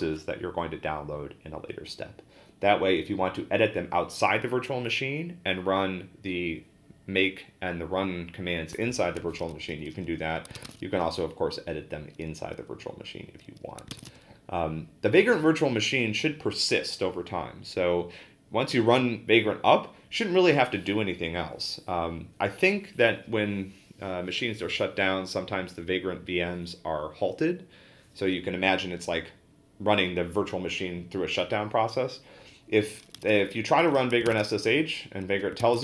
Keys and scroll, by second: 10.6 ctrl+a, 10.7 p, 13.7-14.6 typing, 34.1-35.8 typing, 35.6 ctrl+a.